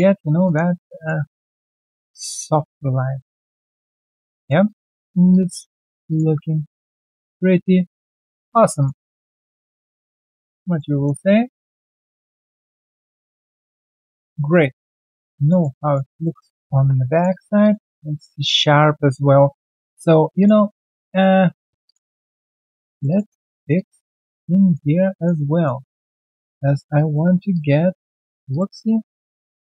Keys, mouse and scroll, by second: 0.1 alt+right click, 0.4 alt+click, 0.7 alt+middle click, 0.9 alt+right click, 1.5 alt+middle click, 2.8 alt+scroll down 1, 3.0 ctrl+1, 3.3 alt+middle click, 3.6 alt+middle click, 3.9 alt+right click, 4.3 alt+middle click, 4.6 alt+click, 5.0 alt+right click, 5.3 alt+click, 5.7 alt+middle click, 7.4 alt+click, 8.0 right click, 8.4 scroll down 1, 9.0 alt+scroll down 1, 9.3 alt+middle click, 9.6 alt+click, 10.3 alt+middle click, 10.6 alt+click, 10.9 alt+right click, 11.7 alt+middle click, 12.2 alt+click, 12.5 alt+middle click, 12.8 alt+click, 14.3 alt+click, 14.6 alt+right click, 15.0 alt+middle click, 15.3 alt+click, 15.7 alt+right click, 16.0 alt+click, 16.7 3, 17.1 alt+click, 17.3 alt+right click, 17.6 alt+click, 17.9 alt+middle click, 18.1 alt+right click, 18.5 right click, 19.4 ctrl+right click, 20.5 ctrl+1, 20.9 alt+click, 21.4 alt+click, 22.4 right click, 23.0 double click, 23.6 shift+click, 23.7 shift+double click, 24.1 shift+click, 24.5 alt+middle click, 25.9 alt+click, 26.9 shift+click, 28.5 ctrl+click, 29.0 shift+click, 29.2 shift+double click, 29.4 scroll down 2.